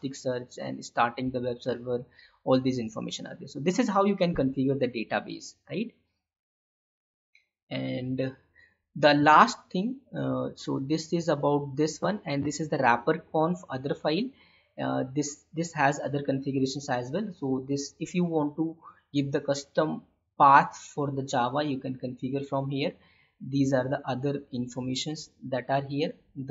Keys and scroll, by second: 9.4 alt+Tab, 10.6 alt+Tab.